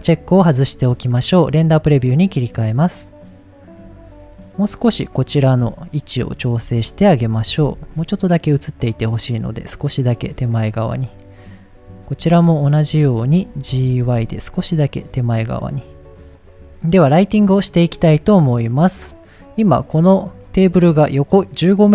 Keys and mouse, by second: 1.6 click, 2.4 click, 4.7-5.4 drag, 6.1-6.4 ctrl+drag, 7.4 g, 7.6 y, 10.4 click, 11.5-12.0 drag, 12.6-13.0 ctrl+drag, 13.7 g, 14.0 y, 15.8 click, 18.7 click.